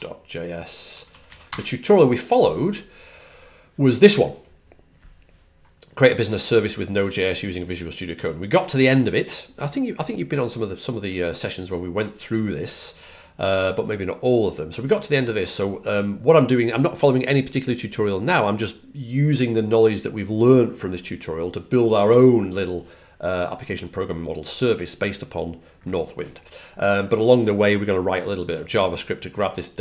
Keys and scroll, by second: 0.0-1.9 typing, 0.8 Page_Down, 5.1-5.9 typing, 7.5-9.1 typing, 11.5-12.2 typing.